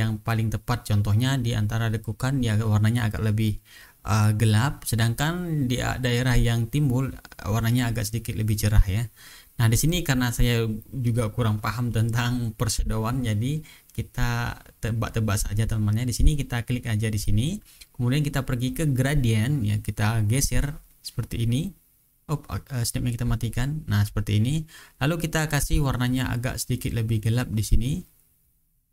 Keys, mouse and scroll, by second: 15.2-15.7 ctrl+scroll down 2, 15.7 ctrl+click, 16.4 ctrl+scroll up 2, 17.3 click, 19.2 click, 21.4 click, 22.7-24.2 drag, 24.3 click, 26.0 click, 27.3 click, 28.1-28.9 drag.